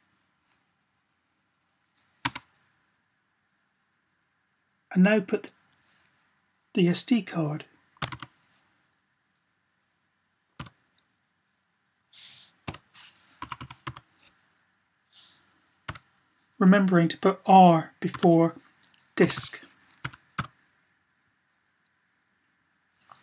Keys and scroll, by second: 7.8 typing, 10.3 =, 12.5-13.6 typing, 15.6 typing, 17.6-20.1 typing.